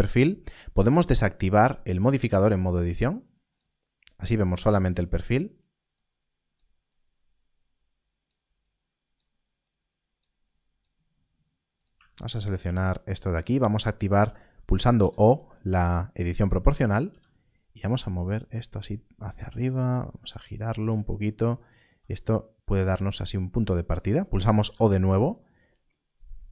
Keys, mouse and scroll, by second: 3.5 click, 12.0 shift+click, 17.0 g, 17.7-19.1 scroll down 1, 19.2 click, 19.8 r, 21.5 g, 21.5 click, 22.8 r, 22.9 click, 24.5 click, 25.1 0, 25.9 click.